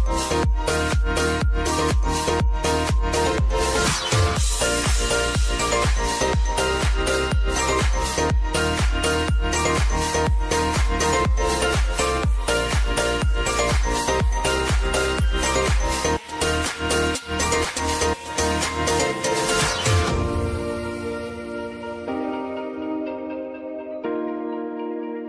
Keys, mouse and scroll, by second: 6.9-7.7 scroll up 1, 9.2 click, 13.3-15.2 typing, 16.1 click, 19.3 Return, 21.0-25.2 drag.